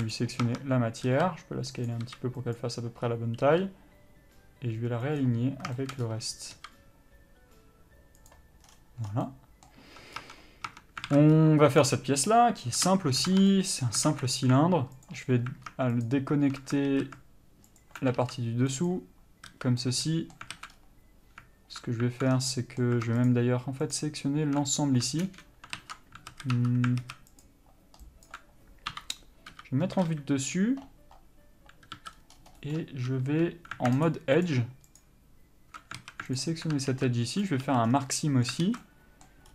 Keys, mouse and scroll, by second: 0.1 alt+a, 0.3 click, 0.6 Tab, 1.3 s, 2.0 click, 2.2 s, 3.6 r, 6.7 s, 8.5 click, 9.2 scroll down 1, 9.4 middle click, 10.1 Tab, 10.3 scroll up 1, 10.5 Tab, 11.3 alt+a, 11.5 scroll up 1, 12.0 click, 12.9 KP_Divide, 13.4 Tab, 13.7 middle click, 14.3 alt+a, 14.5-15.2 scroll up 1, 15.2 alt+click, 17.0 alt+a, 17.9 alt+click, 19.0 ctrl+e, 19.7 a, 20.0 middle click, 20.7 alt+a, 20.9 scroll up 1, 22.4 scroll down 1, 22.7 middle click, 23.4 alt+shift+click, 25.4 ctrl+KP_Add, 25.9 ctrl+z, 26.5 a, 26.7 1, 27.2 alt+a, 27.6 alt+click, 29.7 KP_7, 30.2 KP_5, 32.7 c, 33.4 2, 34.2 alt+shift+click, 36.2 alt+a, 36.6 alt+click, 37.6 ctrl+e, 37.8 a, 38.0 scroll down 1, 38.2 middle click, 38.8 alt+a, 39.0 middle click.